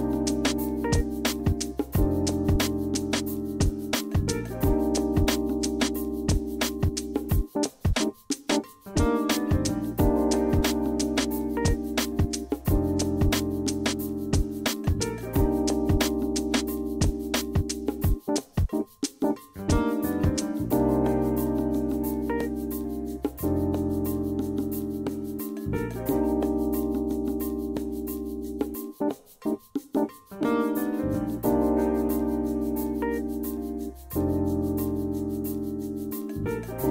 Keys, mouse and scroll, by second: 0.9 a, 5.1 click, 5.5 click, 7.8-10.4 drag, 19.0 Escape, 23.3 F8, 24.1 middle click, 24.3 middle click, 24.7 middle click, 25.0-25.4 middle drag, 25.5 middle click, 25.7 middle click, 25.9-28.2 middle drag, 28.4 d, 29.2 click, 29.6 click, 30.0 middle drag, 30.3 middle click, 32.3 click, 33.0 middle click.